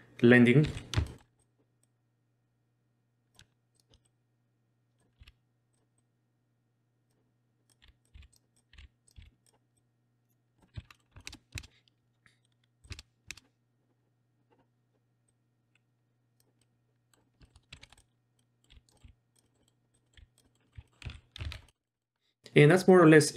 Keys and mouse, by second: 0.6 z, 1.1 shift+middle click, 1.4 click, 1.8-3.3 drag, 3.7 shift+click, 4.0 click, 5.2 r, 6.0-7.1 drag, 7.7 click, 7.8 r, 8.1 r, 8.5 click, 8.7 r, 9.1 r, 9.8 click, 10.7 z, 10.9 middle click, 11.2 shift+middle click, 11.3 shift+space, 11.6 shift+space, 12.8 click, 12.9 shift+space, 13.3 shift+space, 15.3-16.4 drag, 16.6-17.1 middle drag, 17.4 shift+middle click, 17.7 z, 17.8 shift+middle click, 18.4 middle drag, 18.7 r, 18.9 middle click, 19.0 r, 19.4 middle click, 19.6 middle drag, 20.0 middle click, 20.2 r, 20.4 middle click, 20.6 middle click, 20.9 middle click, 20.9 z, 21.0 z, 21.5 alt+a, 21.7 middle click, 21.8 middle click, 21.9 middle click, 22.2 middle click.